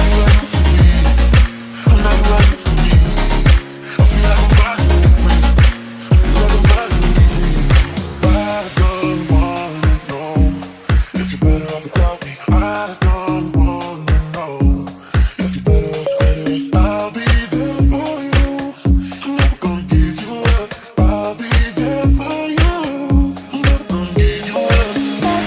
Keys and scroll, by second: 0.8 space.